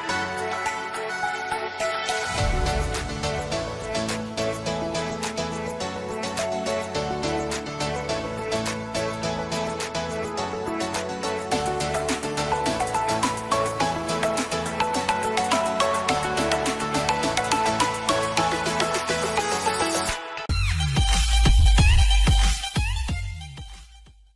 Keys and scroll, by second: 9.3 ctrl+g.